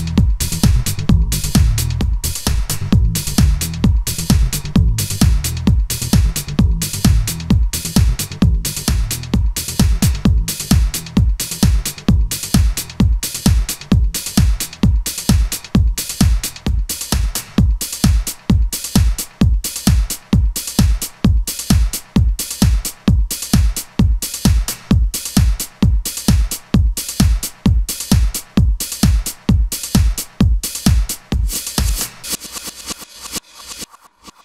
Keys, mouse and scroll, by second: 9.7 F11, 10.5 a, 10.7 b, 14.7 shift+F6, 18.1 a, 18.3 a, 19.4 v.